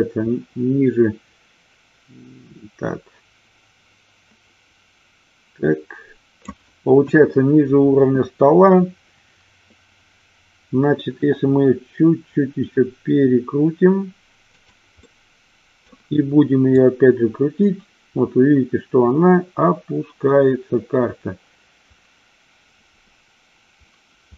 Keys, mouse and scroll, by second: 7.1 KP_1, 11.5 r, 14.7 click, 15.2 middle click, 16.9-24.3 drag.